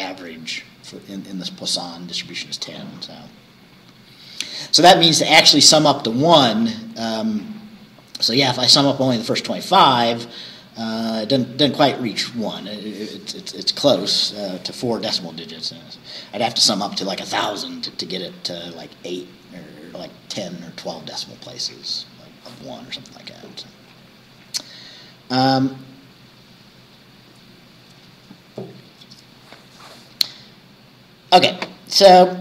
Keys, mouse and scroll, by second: 3.5-4.0 scroll down 2, 4.6 scroll down 2, 5.4-5.7 scroll down 2, 22.0 scroll down 2, 22.7-23.1 scroll down 2, 23.5-23.9 scroll down 2, 24.1 scroll down 1.